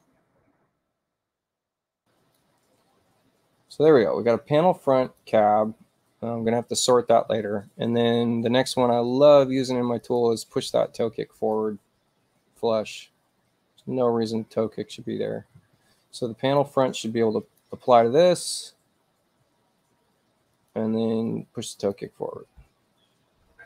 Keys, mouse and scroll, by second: 0.1 click, 1.9 click, 5.2 click, 10.1 click, 11.4 click, 16.5 click, 17.5 click, 20.5 click, 21.8 click.